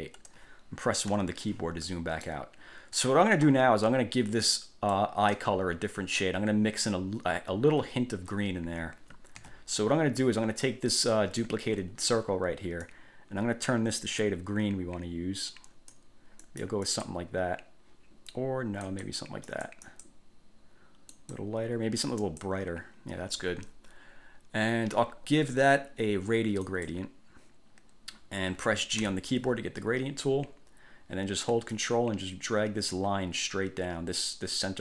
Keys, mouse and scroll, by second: 1.2 1, 2.0 middle click, 5.0-5.6 drag, 9.6 ctrl+z, 11.1 click, 11.9 ctrl+z, 13.0-16.3 drag, 16.6 click, 19.0 click, 19.6-20.4 drag, 21.3 click, 22.4 click, 26.8 click, 29.2 g, 31.9-34.8 ctrl+drag.